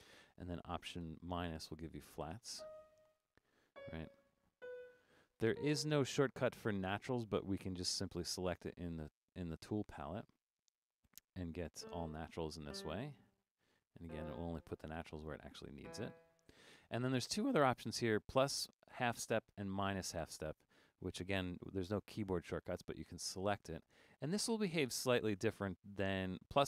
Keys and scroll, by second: 1.0 alt+-.